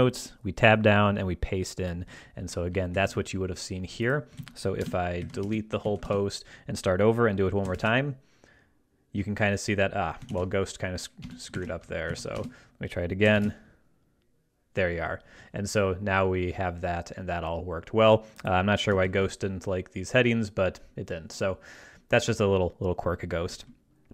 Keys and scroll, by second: 2.9 ctrl+Right, 4.4 super+a, 4.8 super+BackSpace, 5.2 shift+Tab, 5.4 shift+BackSpace, 5.8 super+a, 6.0 super+BackSpace, 7.0 BackSpace, 7.7 ctrl+alt+super+b, 8.0 ctrl+alt+super+1, 8.1 shift+n, 10.3 super+a, 11.2 super+BackSpace, 11.6 shift+Tab, 12.1 shift+super+a, 12.3 super+BackSpace, 13.3 ctrl+alt+super+BackSpace, 13.3 ctrl+alt+super+b, 13.6 ctrl+alt+super+2, 13.7 e, 19.0 alt+super+2.